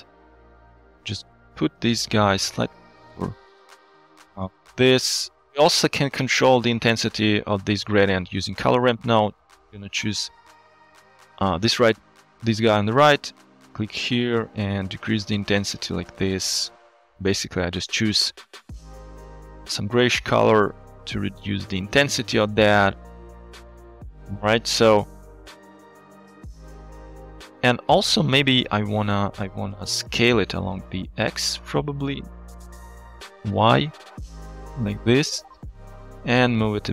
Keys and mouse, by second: 0.2 middle click, 1.1 shift+click, 1.6-3.2 shift+drag, 3.5-5.5 shift+drag, 5.9 shift+middle click, 6.6 middle click, 8.7 click, 9.9 click, 13.5 drag, 24.0 click, 25.5 shift+middle click, 27.4 shift+middle click, 28.9 shift+middle drag, 29.5 shift+middle click, 30.9 shift+click, 32.5 ctrl+z, 33.3-36.1 shift+drag, 36.4 shift+middle click, 36.5 shift+click.